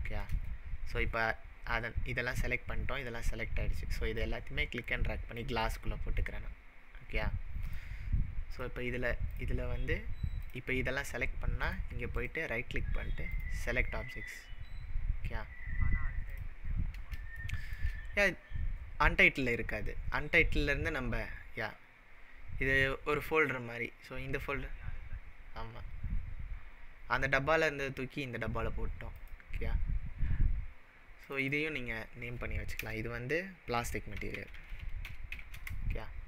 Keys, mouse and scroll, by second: 1.0-2.9 scroll down 13, 4.2-5.4 click, 6.7-7.6 scroll up 1, 7.6 scroll up 4, 7.7 click, 8.5 click, 9.3 drag, 10.4 click, 11.6 click, 12.1 right click, 13.3-15.4 right drag, 13.3 click, 16.3 click, 17.4-17.9 shift+middle drag, 29.2 click, 31.3 click, 31.4-34.5 drag, 33.5-35.8 typing.